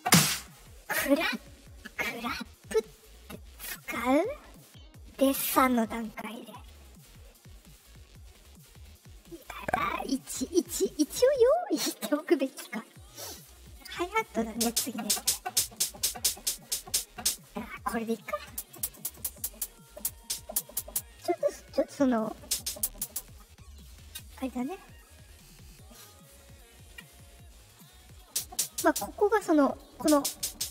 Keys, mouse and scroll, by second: 13.6 click, 21.7 click, 24.9-25.9 middle drag.